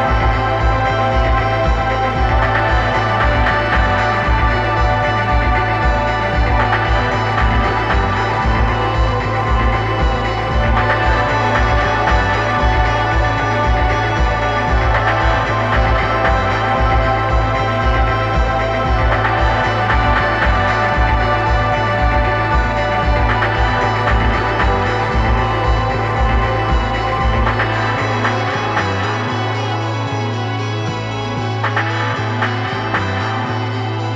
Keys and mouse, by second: 0.7-3.8 drag, 5.1-6.3 drag, 6.8 click, 6.8 right click, 7.2 click, 8.3-11.6 drag, 12.9-14.8 drag, 15.1-18.1 drag, 18.7-21.0 drag, 33.7-34.1 drag.